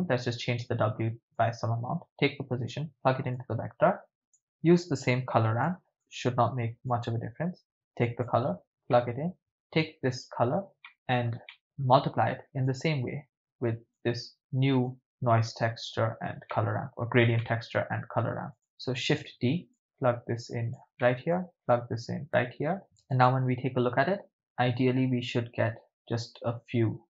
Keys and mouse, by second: 1.4-3.4 drag, 4.3 click, 4.3 middle click, 5.5 shift+d, 5.9 click, 6.9-8.3 drag, 8.9 middle click, 10.9 ctrl+middle click, 11.5 middle click, 12.7 click, 14.0 click, 15.1 click, 16.5 ctrl+middle drag, 16.7 ctrl+click, 17.4-17.8 ctrl+middle drag, 18.5 click, 19.1 shift+d, 19.7-20.8 drag, 21.0 middle click, 21.7-22.8 drag, 23.4 ctrl+shift+drag.